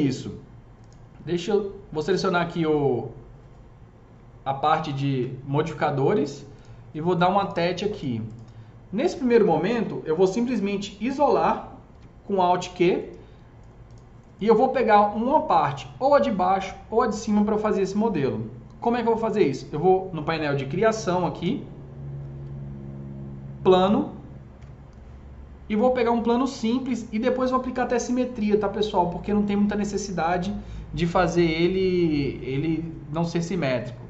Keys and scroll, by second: 11.9 alt+q.